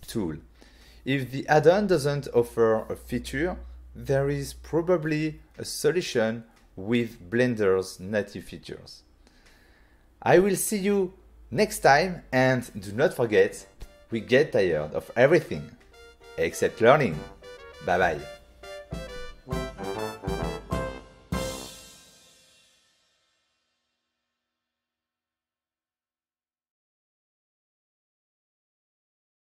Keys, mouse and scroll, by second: 0.0 right click, 0.3 click, 0.6 f, 1.3 click, 2.1 click, 2.8 ctrl+click, 3.8 ctrl+middle click, 4.7 shift+click, 5.4 shift+click, 6.9 Return, 8.2 click, 8.8 click, 9.5 click, 9.6 click, 10.4 click, 10.7 shift+middle click, 12.7 right click, 14.4 click, 14.8 shift+middle click, 15.5 click, 19.2 middle click.